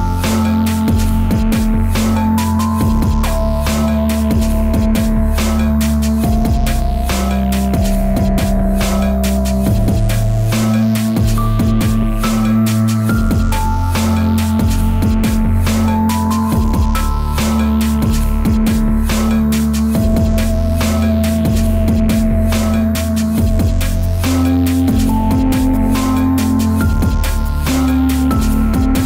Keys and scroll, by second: 19.7 Return.